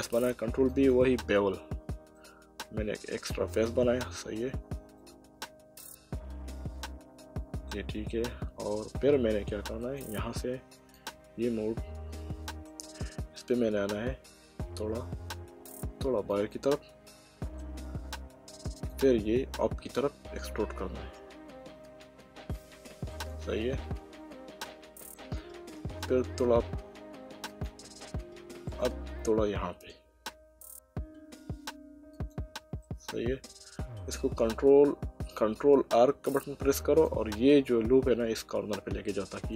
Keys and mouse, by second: 0.7 click, 2.2 middle click, 5.0 middle click, 8.1 middle click, 9.8 click, 10.9 click, 12.2 middle click, 14.4 e, 16.3 click, 17.1 middle click, 18.8 click, 20.4 e, 23.1 click, 23.8 middle click, 26.2 e, 27.5 click, 28.7 click, 29.8 e, 32.2 click, 32.8 middle click, 34.4 ctrl+e, 36.2 ctrl+r, 37.0 click, 39.4 click.